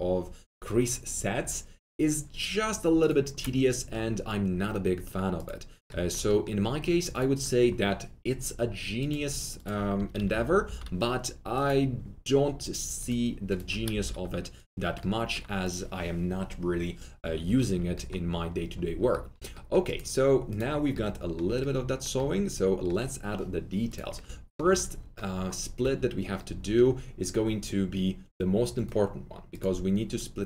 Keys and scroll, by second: 9.9 F3, 10.1 F3, 10.2 F4, 10.6 F4, 13.7 F3, 13.8 F3, 14.0 F4, 17.4 alt+w, 25.8 alt+2.